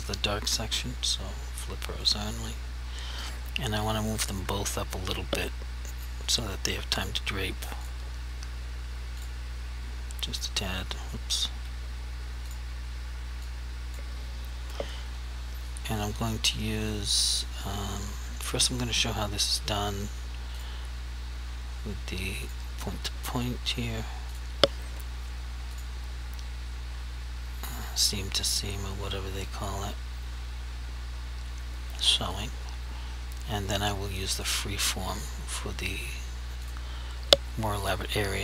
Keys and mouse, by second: 0.2 right click, 2.1 click, 6.2 click, 7.9 shift+click, 9.3 click, 11.7 ctrl+z, 12.5 click, 13.6 click, 19.5 click, 32.4 click.